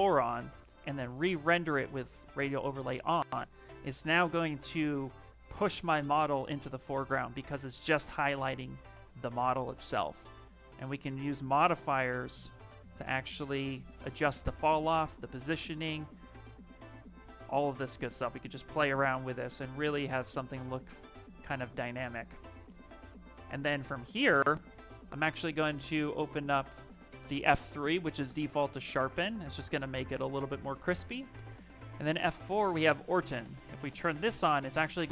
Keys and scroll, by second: 0.8 shift+r.